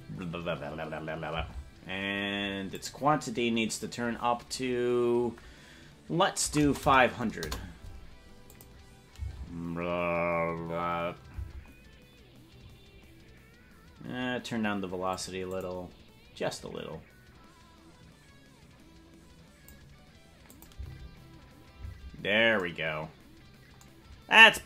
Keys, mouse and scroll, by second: 1.4 space, 2.7-7.8 drag, 6.8 KP_0, 8.6 click, 9.1 space, 11.4 space, 15.1 click, 15.4 click, 16.5-19.7 drag, 20.5 click, 20.7 space, 21.8 space.